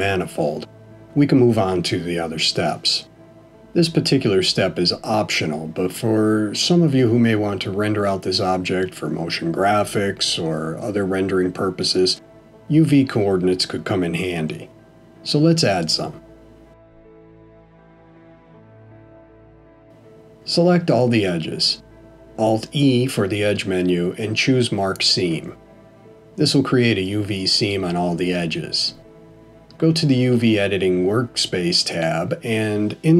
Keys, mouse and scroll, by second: 2.3 middle click, 19.5 a, 22.0 right click.